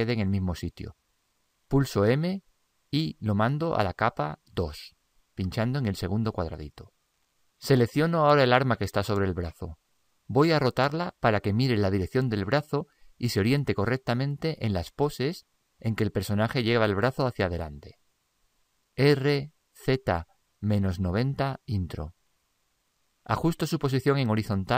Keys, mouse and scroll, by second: 2.2 m, 7.3-9.4 middle drag, 9.4-11.1 right drag, 19.2 r.